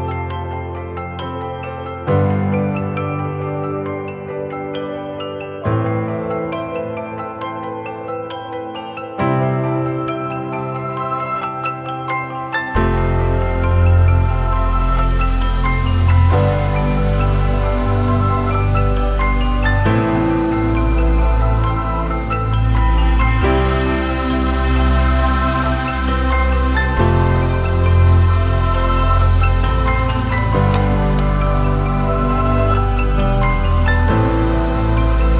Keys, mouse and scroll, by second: 4.5 Return, 10.3 alt+BackSpace.